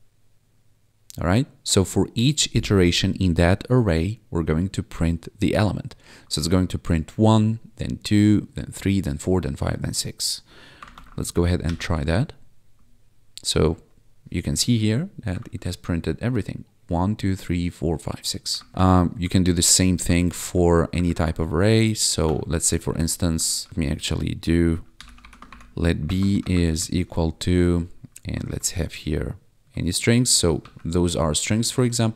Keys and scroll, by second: 10.9 ctrl+`, 11.3 Up, 11.6 Return, 15.5 1, 18.7 ctrl+`, 19.1 Up, 21.0 alt+shift+Down, 21.5 ctrl+s, 22.2 Escape, 22.8 Right, 23.4 ctrl+z, 23.7 Return, 24.7-26.6 typing, 28.4 shift+', 30.6 ctrl+s, 31.7 Tab.